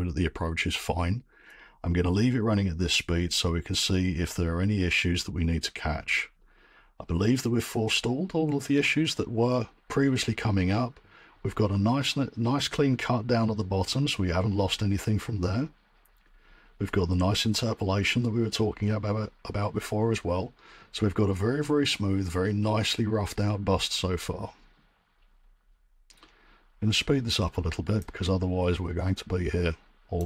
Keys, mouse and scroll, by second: 30.1 click.